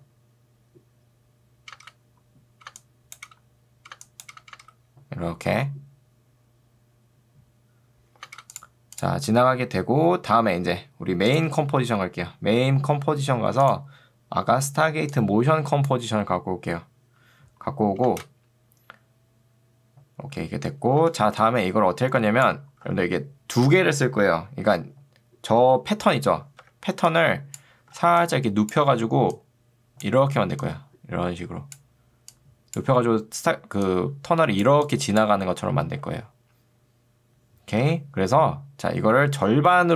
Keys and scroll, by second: 1.7 space, 8.3 space, 18.1 space, 21.1 space, 22.9 ctrl+2, 26.7 Escape, 28.1 ctrl+2, 37.9 Escape.